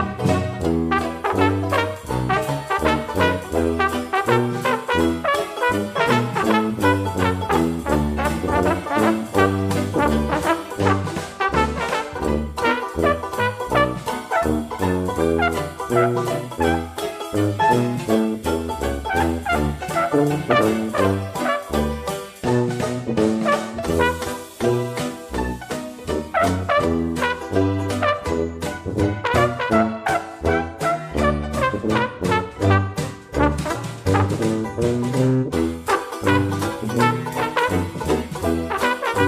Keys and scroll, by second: 18.1 ctrl+z.